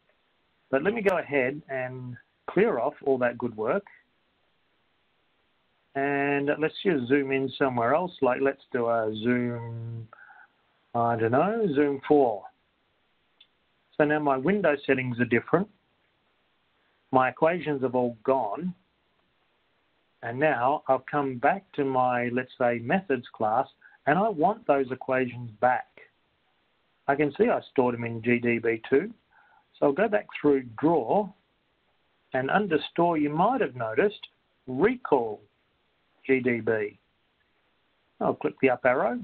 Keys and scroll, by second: 2.2 Down, 4.2 Down, 12.7 4, 32.5 Down, 37.9 Up.